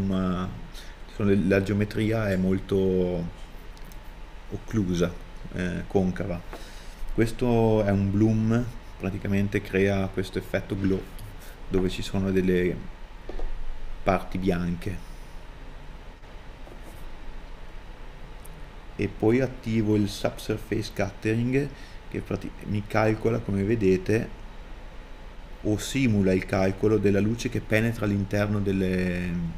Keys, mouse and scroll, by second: 3.7 scroll down 1, 4.1 middle click, 16.0-16.5 scroll down 1, 16.5 scroll up 1, 17.9 scroll down 1.